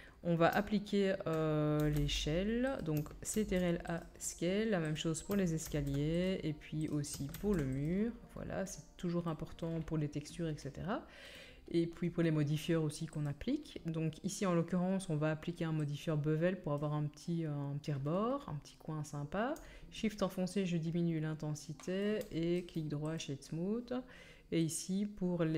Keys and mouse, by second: 1.8 g, 3.3 ctrl+a, 5.7 ctrl+a, 6.9 click, 7.3 ctrl+a, 7.9-18.4 drag, 15.9-24.7 middle drag, 15.9-18.4 right drag, 24.7-25.5 drag.